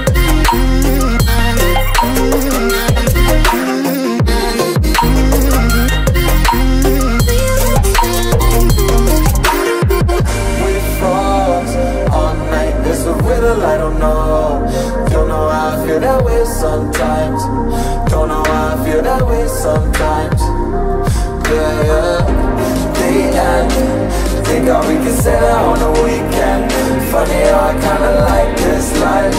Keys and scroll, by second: 0.2 ctrl+v, 1.9 ctrl+z, 11.9 space.